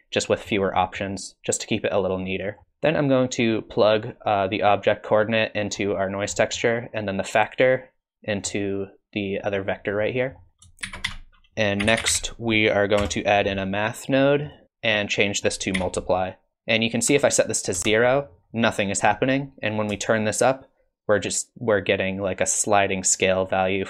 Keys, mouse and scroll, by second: 0.3 middle click, 0.8 middle click, 1.7 click, 2.6 click, 3.0 click, 6.3 middle click, 7.2 click, 10.1 middle click, 10.5 click, 10.8 shift+a, 14.9 click, 16.5 click, 20.2 shift+click.